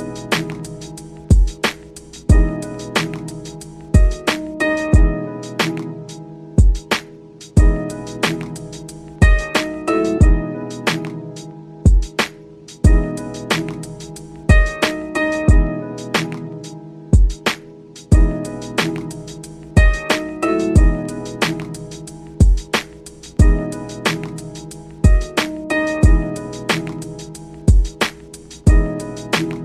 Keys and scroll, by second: 16.0 ctrl+z.